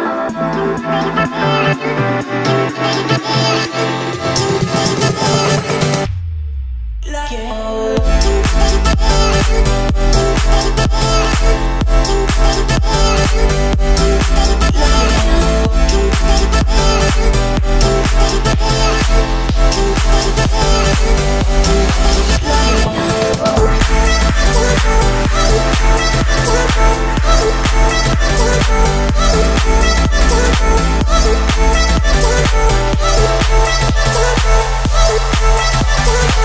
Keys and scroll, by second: 2.4 Escape, 5.5 Escape, 6.8 Escape, 11.1 Escape, 12.1 Delete, 13.7 Escape, 19.3 Escape, 20.5 Escape, 21.9 Escape, 26.9 Escape, 28.1 Escape, 30.1 o, 32.1 Escape.